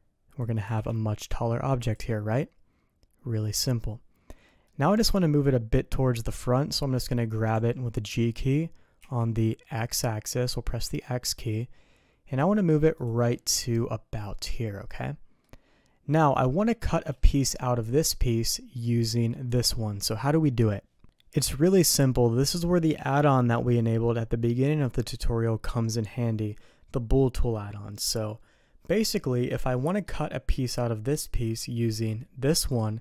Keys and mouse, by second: 0.6 g, 2.3 middle click, 3.0 click, 3.6-4.6 middle drag, 4.9 shift+middle click, 7.5 g, 13.3-15.4 middle drag, 16.1 middle drag, 17.1 shift+middle drag, 19.5-21.0 drag, 21.6 middle click, 30.0 middle click, 32.7 click.